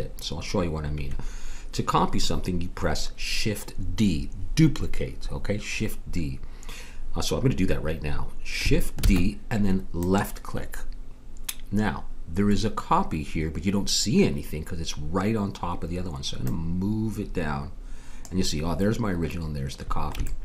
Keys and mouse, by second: 9.0 shift+d, 16.4-18.2 drag, 20.2-20.4 middle drag.